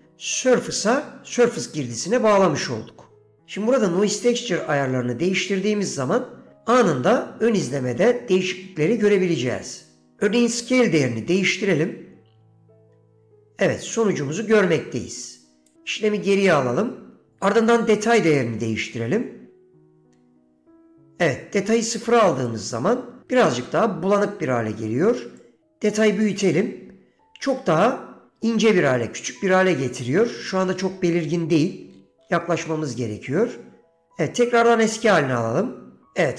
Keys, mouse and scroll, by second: 11.5-15.8 drag, 16.1 ctrl+z, 18.7-22.6 drag, 25.5 click.